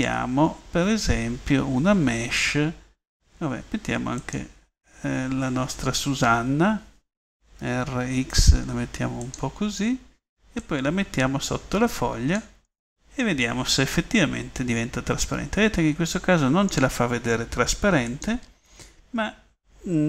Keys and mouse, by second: 7.6 r, 13.0 middle click, 15.5 middle click, 15.8 click, 16.2 middle click, 18.1-19.7 drag.